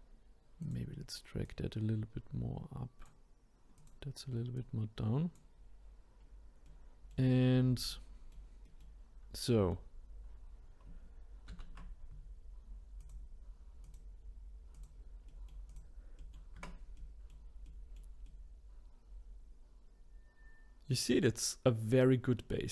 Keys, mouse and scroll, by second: 0.6 click, 1.4 click, 3.8 click, 4.5 click, 6.2-6.6 scroll down 2, 6.6 middle click, 7.4-7.9 scroll down 2, 7.9-11.5 middle drag, 11.5 ctrl+s, 13.0-14.9 drag, 15.3 middle click, 15.7 click, 16.2 middle click, 16.5 Tab, 16.9-21.5 middle drag, 21.5-21.9 scroll up 4, 21.9-22.4 scroll down 1, 22.4-22.7 middle drag.